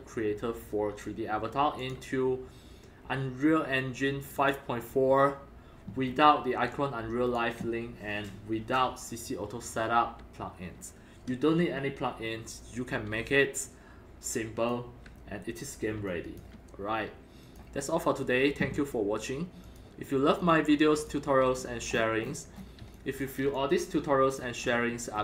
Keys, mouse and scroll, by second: 1.7 scroll down 4, 1.8 click, 4.2 click, 4.4 click, 6.1 scroll up 2, 6.7 alt+click, 7.4-9.2 alt+drag, 13.3-14.7 alt+drag, 16.1 alt+click, 17.4 click, 19.6 click, 20.4 click, 21.0 click, 21.5-22.6 scroll up 22, 22.8-25.2 typing, 22.9 click, 23.5 click, 24.6 click, 24.7-25.1 scroll up 4, 25.1 scroll.